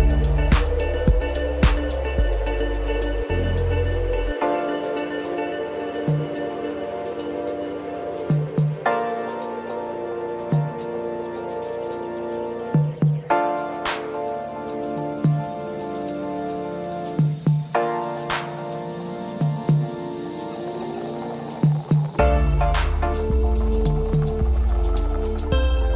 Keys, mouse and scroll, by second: 1.6-2.0 scroll down 2, 2.0 click, 2.6 space, 5.8 click, 7.6-8.3 scroll up 1, 8.3-10.5 middle drag, 10.5 click, 11.2 shift+click, 12.3 shift+click, 13.0 middle click, 13.7 scroll down 1, 13.9-15.1 middle drag, 15.1 g, 17.0 s, 18.4-21.4 middle drag, 24.1-25.5 scroll up 1, 25.5 g.